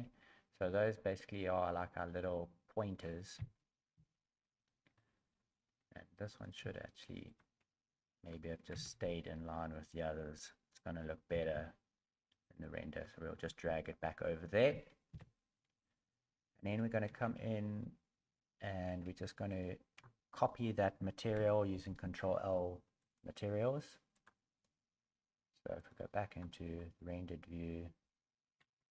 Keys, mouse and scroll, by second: 1.1 middle click, 3.4 KP_1, 3.9 KP_3, 4.9 middle click, 4.9 KP_1, 4.9 KP_3, 5.8 Tab, 6.4 right click, 6.9 shift+right click, 7.2 shift+right click, 8.7 KP_7, 19.5 shift+right click, 19.5 shift+a, 21.7 ctrl+l, 25.8 click, 28.5 a, 28.7 a.